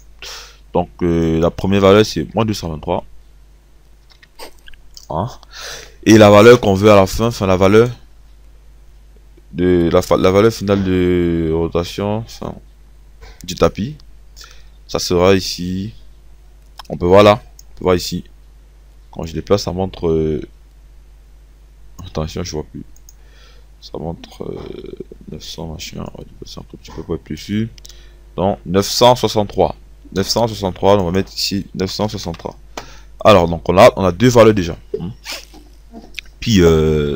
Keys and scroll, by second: 2.3 ctrl+v, 4.6 KP_3, 31.9 KP_9.